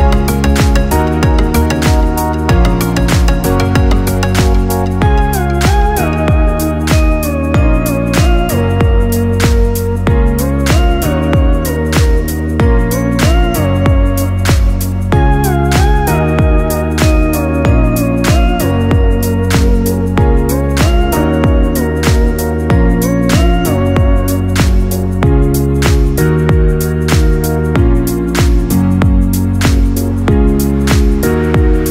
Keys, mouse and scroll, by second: 0.4 e, 2.6 right click, 3.1 g, 4.5 right click, 4.8 g, 6.2 right click, 6.4 g, 7.7-8.6 scroll down 2, 8.6 scroll down 2, 8.6 middle click, 9.3-10.2 scroll down 1, 10.2 KP_7, 11.0-11.8 scroll up 8, 11.8 shift+middle click, 12.6 right click, 12.9 g, 14.3 right click, 14.6 g, 16.0-17.1 shift+middle drag, 17.1 right click, 17.4 g, 18.6 right click, 19.1 right click, 19.4 g, 20.8 scroll down 4, 21.6-21.9 scroll down 1, 22.0-22.6 scroll up 2, 22.6 scroll up 2, 22.6 right click, 23.0 g, 24.0 right click, 24.4 g, 26.2 right click, 26.6 g, 27.5 right click, 28.1 g, 29.3 right click, 29.7 g, 30.7 scroll down 3, 31.0 Tab, 31.5 z.